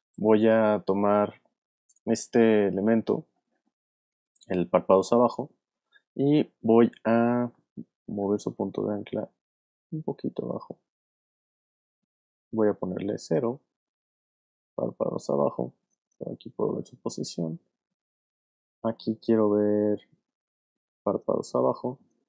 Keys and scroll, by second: 8.2 y, 9.2 shift+y, 16.1 p.